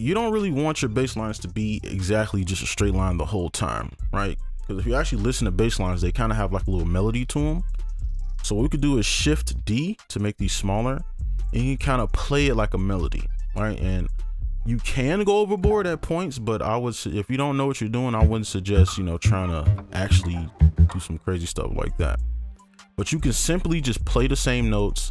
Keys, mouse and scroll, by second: 4.9 right click, 7.9 ctrl+a, 9.1 shift+2, 10.8 right click, 19.2 double click, 21.4 right click.